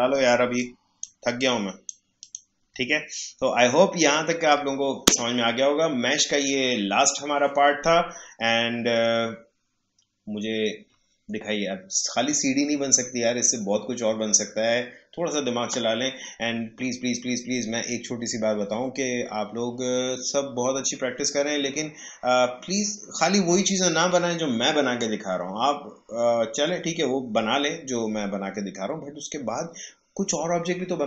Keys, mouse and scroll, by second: 0.3 space, 0.5 click, 0.8 space, 1.4 click, 2.9 alt+scroll up 1, 3.4 alt+scroll down 1.